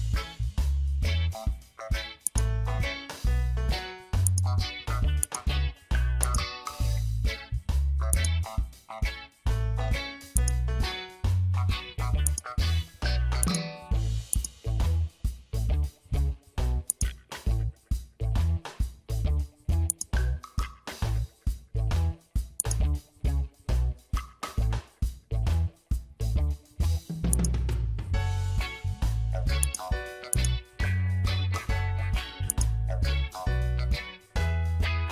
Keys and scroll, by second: 3.4 ctrl+z, 6.1 space, 14.8 Return, 23.8 ctrl+f, 24.2 ctrl+d.